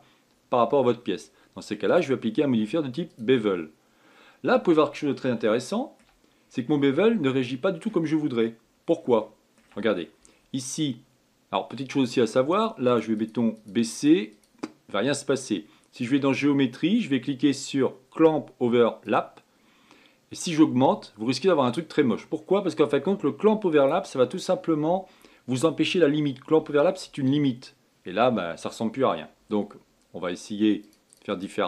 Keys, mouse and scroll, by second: 2.6-4.8 drag, 4.8 scroll up 1, 6.2 shift+middle click, 7.0-7.5 scroll up 3, 7.5-12.7 shift+middle drag, 12.7-19.9 drag, 21.1-22.9 drag, 22.9-23.3 scroll down 4, 23.3-26.3 scroll up 2, 31.5-31.6 drag.